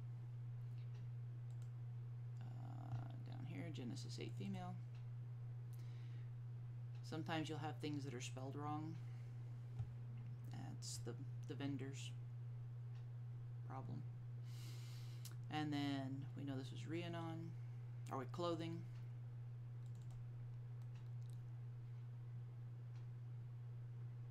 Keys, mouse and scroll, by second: 3.1-4.0 scroll down 1, 4.4 click, 4.6 double click, 6.2-6.8 scroll down 1, 7.6 scroll up 1, 8.6-8.9 scroll up 1, 13.8-14.8 scroll up 1, 14.8 scroll down 1, 17.5-18.6 scroll up 1, 18.6-19.2 scroll up 1, 20.1 click.